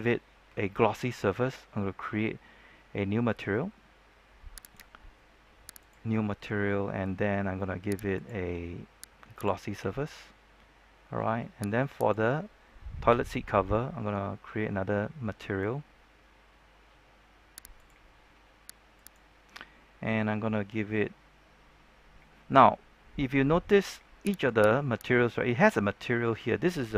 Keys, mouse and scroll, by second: 4.5 click, 11.9 right click, 17.7-18.7 drag, 22.4-24.3 scroll up 1, 24.3 right click.